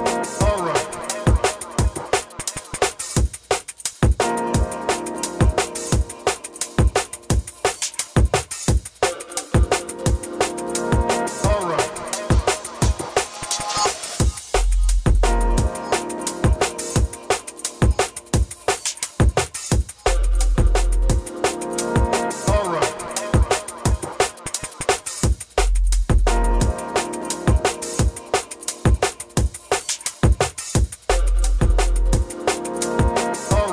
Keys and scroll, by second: 24.0-24.4 scroll.